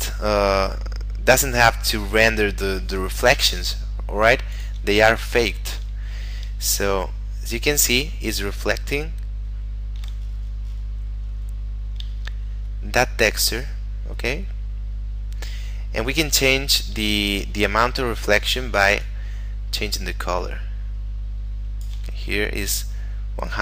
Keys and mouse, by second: 4.6 click, 6.5 shift+middle click, 11.6 KP_Decimal, 12.3 shift+middle click, 19.1 click, 22.2 shift+middle click.